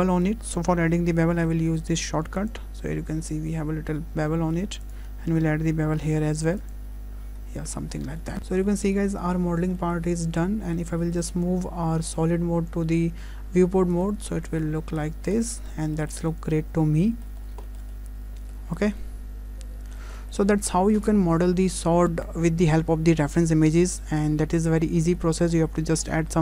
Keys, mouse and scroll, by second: 0.0 click, 0.1 middle click, 1.4 q, 3.2-4.0 scroll up 4, 4.0 scroll down 2, 4.3 shift+middle click, 4.9 click, 6.0 q, 7.6 shift+middle click, 8.0-8.3 scroll down 3, 8.2 middle click, 8.3 shift+middle click, 8.3 scroll up 2.